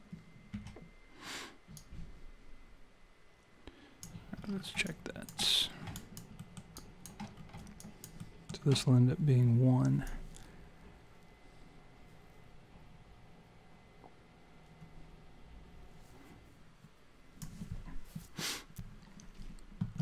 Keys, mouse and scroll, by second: 0.5 s, 1.8 click, 4.4 scroll down 5, 4.9 alt+click, 5.7 scroll down 2, 6.0 alt+click, 6.4 alt+middle click, 6.8 alt+click, 7.4-8.2 scroll up 3, 7.8 alt+click, 8.2 alt+middle click, 10.1 click.